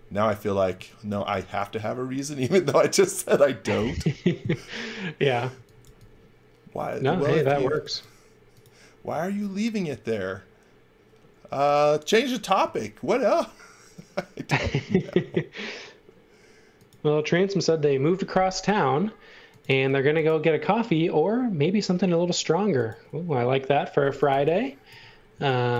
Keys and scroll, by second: 0.7 x, 1.0 v, 5.5 x, 5.8 v, 7.2 space, 12.6 i, 19.9 b, 23.8-25.3 typing.